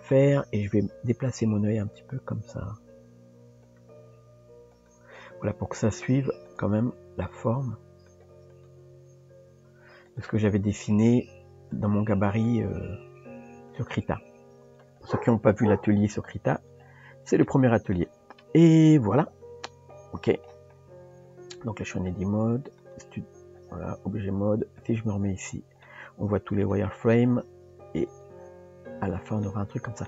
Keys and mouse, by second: 0.0 click, 5.9 click, 6.5 click, 7.1 g, 8.6 click, 10.8 click, 12.3 click, 14.8 click, 16.6 click, 17.4 middle click, 19.0 KP_Decimal, 22.1-23.0 drag, 24.8 click, 25.8-26.6 middle drag, 29.4-30.0 middle drag.